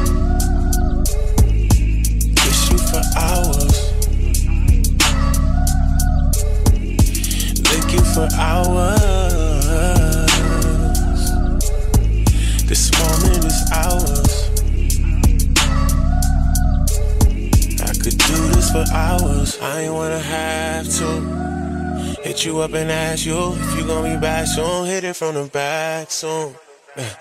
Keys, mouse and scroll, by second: 3.8 click, 5.6 click, 7.6 click, 8.7 click, 10.1 click, 12.7 click, 13.7 click, 14.8 click, 15.6-21.0 drag, 22.4 click, 23.9 click.